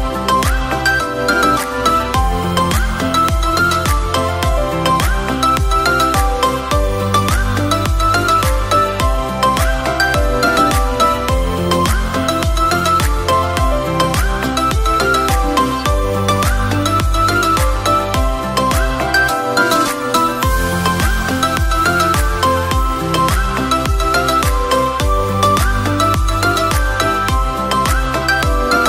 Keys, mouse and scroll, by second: 7.2 click, 8.6 shift+click, 10.4 shift+click, 13.4 r, 18.8 r, 21.2 r, 26.3 click.